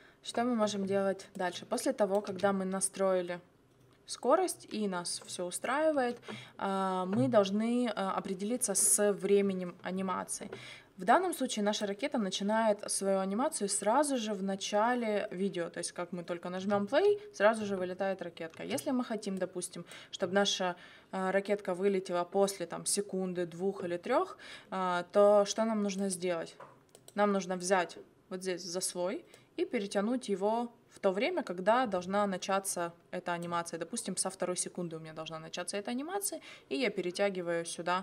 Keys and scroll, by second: 2.2 space, 5.9 space, 16.5 space, 18.5 space.